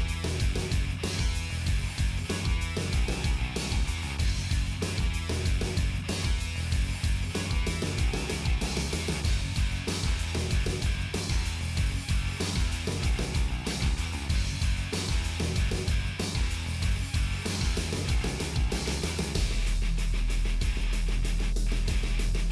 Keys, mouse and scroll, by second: 0.0 g, 1.0 middle click, 1.4 ctrl+s, 1.9-2.3 scroll up 1, 2.7 click, 3.4-4.4 right drag, 4.4 click, 5.2 shift+click, 5.5 f, 5.7 click, 6.4 f, 6.5 shift+click, 7.1 f, 7.2 click, 7.7 f, 7.8 middle click, 8.4 shift+click, 9.2 right click, 9.9-11.6 drag, 11.6 f, 15.2 click, 15.8 f, 18.6 shift+click, 19.1 f, 19.2 shift+click, 19.5 f, 19.6 middle click, 20.3 middle click, 20.9-22.1 drag, 22.1 middle click.